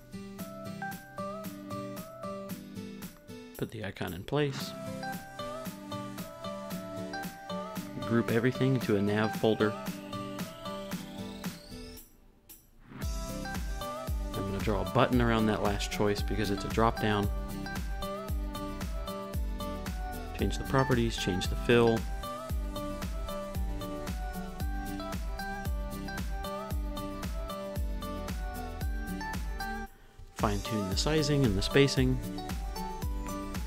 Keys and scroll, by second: 5.0 Left, 8.7-10.0 typing, 11.8 r, 12.5 u, 13.5 u, 26.8-28.0 typing, 28.8 Up, 28.9 Left, 29.4 Right, 30.0 Down, 30.1 Up, 30.2 Left, 30.4 Down, 30.6 Left.